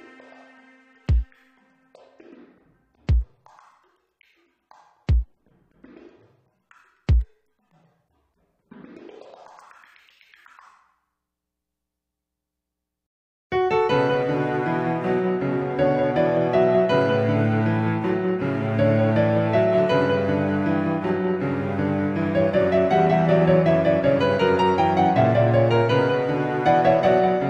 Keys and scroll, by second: 24.6 alt+z, 25.1 Tab, 25.7 Tab.